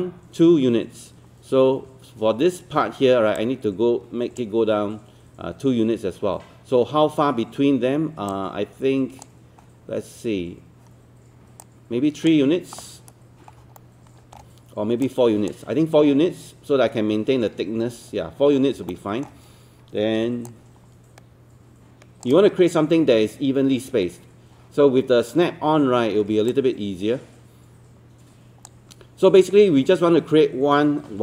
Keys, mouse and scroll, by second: 3.4-13.2 drag, 13.8 alt+middle click, 15.1-16.2 drag, 18.9 alt+middle click, 20.5-22.3 shift+drag, 22.5-26.0 scroll down 1, 26.5-28.7 shift+drag.